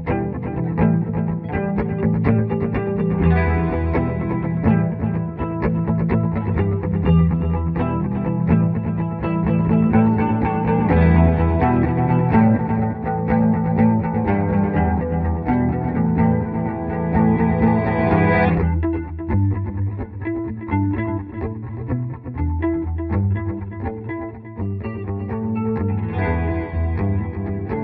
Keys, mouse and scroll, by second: 2.6 click, 4.1 click, 5.7 F4, 7.4-9.1 drag, 9.1 F2, 9.8-12.2 drag, 12.2-13.6 drag, 13.6-17.1 drag, 18.1 click, 20.8 click, 22.7 right click, 23.8 F12, 26.0 click.